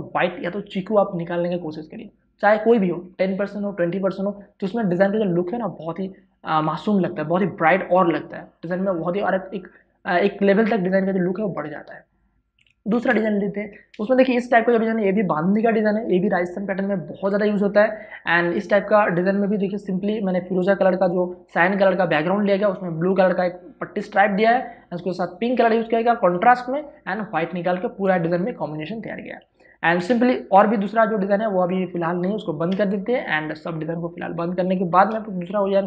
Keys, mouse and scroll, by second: 13.0 ctrl+shift+Tab, 30.0 ctrl+shift+Tab, 32.7 ctrl+alt+w, 33.7 click, 35.0 ctrl+o.